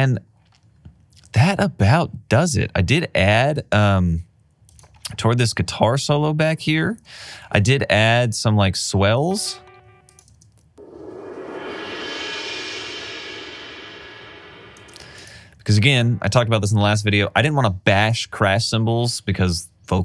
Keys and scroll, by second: 10.3 space, 14.8 space.